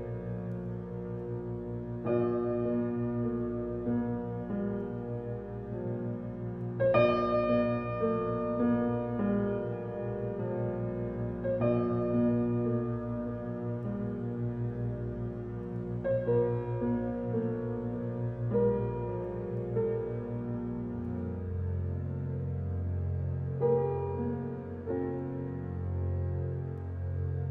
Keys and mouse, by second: 3.3 typing, 6.4-8.6 drag, 8.7-9.8 ctrl+alt+drag, 10.7 alt+shift+click, 12.0 alt+shift+click, 14.8-17.2 drag, 18.3 ctrl+z, 19.1-20.8 drag, 21.9 ctrl+alt+click, 24.3 ctrl+z, 25.2 ctrl+alt+click.